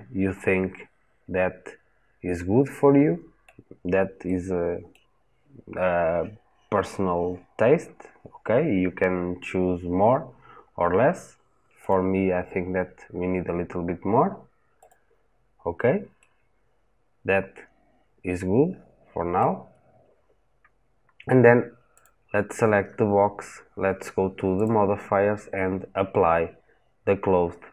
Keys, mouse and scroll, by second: 4.1-11.7 middle drag, 11.7 click, 16.0-19.2 middle drag, 21.8 click.